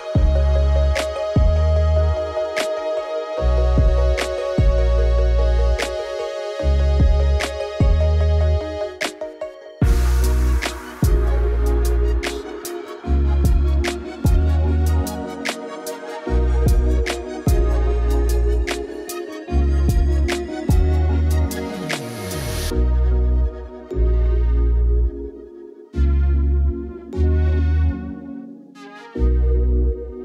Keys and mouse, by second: 0.3 click, 0.7 click, 2.4 click, 3.3 z, 3.8 alt+shift+z, 3.9 KP_0, 4.1 alt+shift+z, 4.6 shift+s, 5.1 shift+a, 7.7 Tab, 7.9 s, 8.4 KP_0, 8.6 Tab, 8.9 z, 10.2 click, 11.3 click, 12.1 click, 13.4 alt+shift+z, 15.6 alt+shift+z, 16.7 click, 16.8 click, 19.0 space, 19.8 click, 20.7 click, 22.7 space, 23.4-24.7 drag, 25.1 click, 25.6 KP_0, 26.1 alt+shift+z, 26.2 alt+shift+z, 26.4 alt+shift+z, 28.3 alt+shift+z, 28.5 click, 29.4 click, 29.7 click.